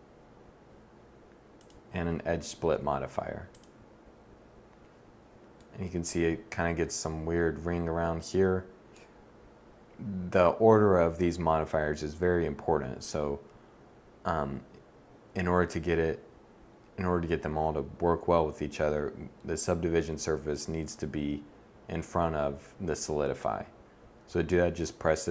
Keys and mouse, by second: 3.1-5.1 middle drag, 15.5 middle click.